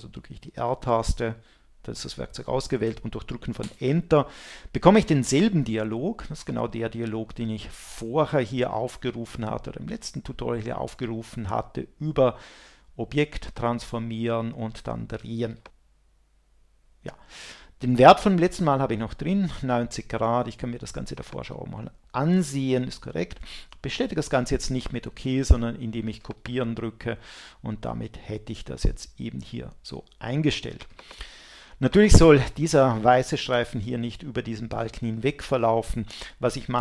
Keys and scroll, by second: 0.5 r, 3.6 Return.